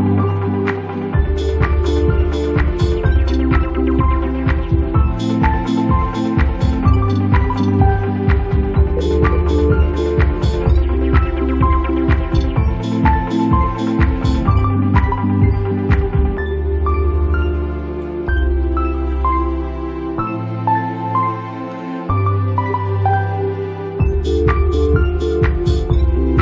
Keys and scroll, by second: 9.6 space, 11.7 space.